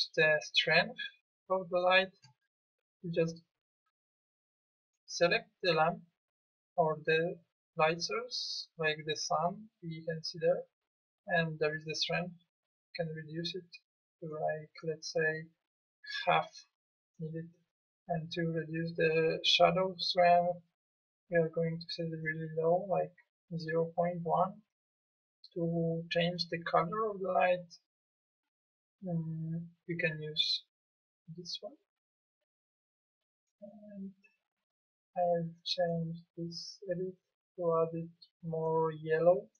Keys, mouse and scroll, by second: 13.8 click, 17.1 click, 23.7 click.